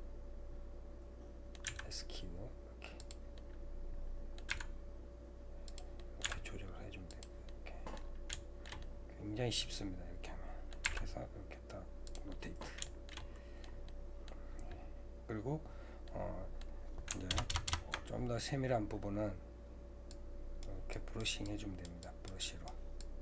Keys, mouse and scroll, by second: 1.7 s, 3.4-4.5 middle drag, 4.5 r, 6.0 middle click, 6.3 g, 7.5 middle click, 8.0-8.3 scroll down 1, 8.3-10.9 middle drag, 10.9 r, 12.3-17.3 middle drag, 17.3 ctrl+KP_Add, 17.5 ctrl+KP_Add, 19.2-20.1 scroll up 4, 20.1-23.2 drag.